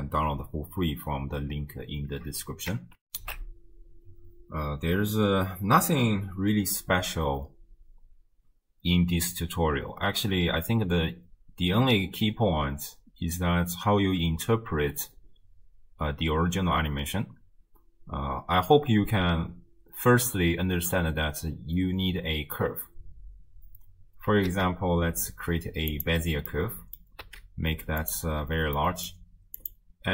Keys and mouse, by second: 3.1 ctrl+alt+shift+w, 3.4 ctrl+alt+shift+q, 24.5 shift+a, 26.6-27.0 drag, 27.2 s, 28.9 click.